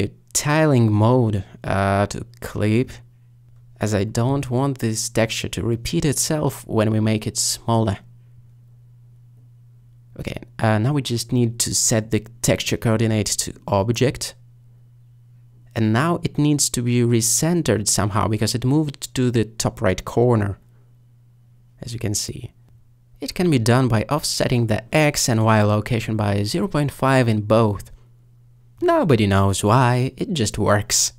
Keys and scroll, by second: 26.7-27.5 typing, 28.1 Return.